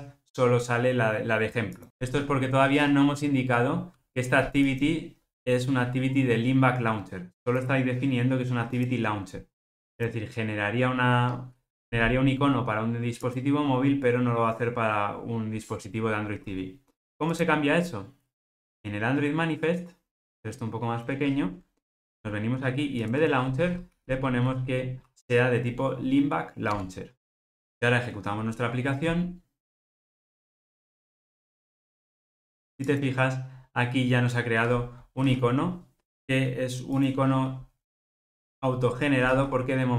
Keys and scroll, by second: 26.8 Tab.